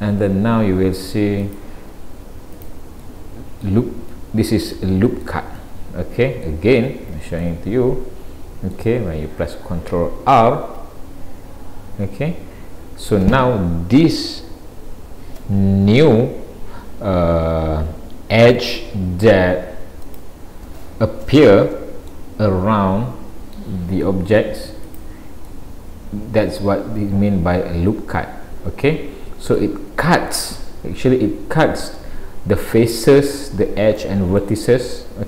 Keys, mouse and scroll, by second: 3.0 middle click, 4.8 middle click, 7.1 ctrl+z, 7.4 middle click, 10.7 ctrl+r, 25.5 middle click, 34.4 middle click.